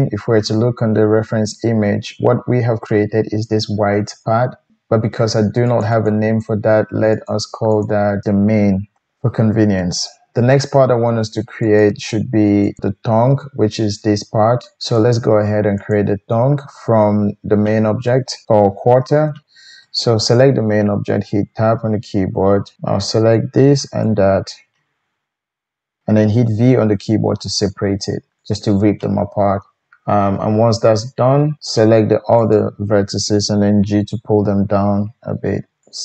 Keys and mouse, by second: 5.7 click, 5.8 middle click, 5.9-7.3 drag, 7.3 middle click, 7.7 click, 7.8-8.2 middle drag, 8.2-11.8 drag, 11.8-12.6 middle drag, 12.6 click, 12.8-14.8 middle drag, 14.8 click, 15.0-15.8 middle drag, 15.8 click, 16.0-19.3 middle drag, 20.3 Tab, 22.7 g, 24.0-26.6 shift+middle drag, 26.6 v, 28.5 typing, 32.4 shift+click, 33.8 g, 35.8 click.